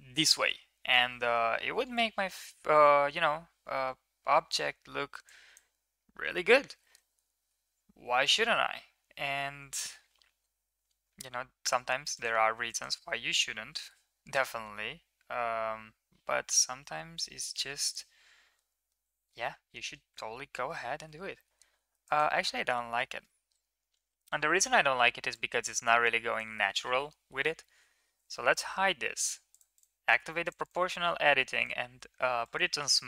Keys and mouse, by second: 0.0-0.4 shift+middle drag, 2.0-4.3 drag, 5.0-5.4 shift+drag, 7.3 g, 12.5 click, 13.5 g, 20.0 ctrl+z, 20.4 ctrl+z, 20.8 ctrl+z, 21.9 click, 25.1-26.2 drag, 27.5 h, 29.3 click, 29.5 click, 30.3 click, 30.6-31.6 drag, 32.4 click.